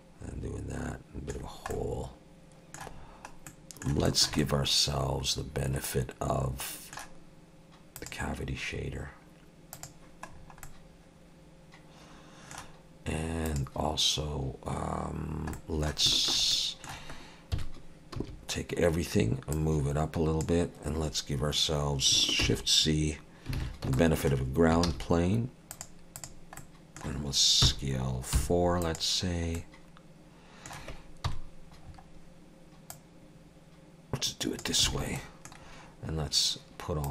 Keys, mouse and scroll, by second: 1.4 scroll down 3, 1.7 middle click, 2.9-3.5 scroll down 2, 3.5 middle click, 4.1 shift+middle click, 4.4 middle click, 8.0 click, 10.3-11.0 scroll down 4, 10.6 middle click, 13.5 click, 15.5 middle click, 16.1 shift+middle click, 17.5 middle click, 17.5 KP_1, 18.2 a, 19.5 click, 22.4 shift+c, 23.6 alt+a, 24.0 shift+middle click, 24.9 shift+a, 26.6 middle click, 27.6 s, 29.3 scroll down 2, 29.6 middle click, 31.3 KP_1, 31.9-32.6 scroll up 3, 32.9 click, 34.9 alt+a, 35.2 middle click, 35.6-37.1 scroll down 3.